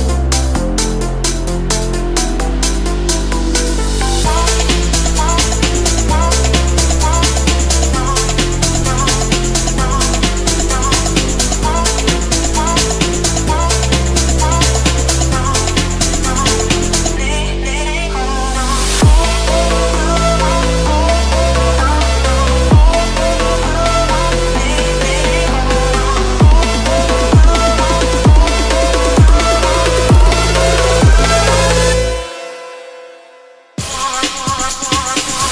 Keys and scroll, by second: 5.6 ctrl+z, 6.1 ctrl+z, 13.3 Delete, 14.6 Left, 15.7 Escape, 20.8 F3, 22.0 F3, 28.0 Escape.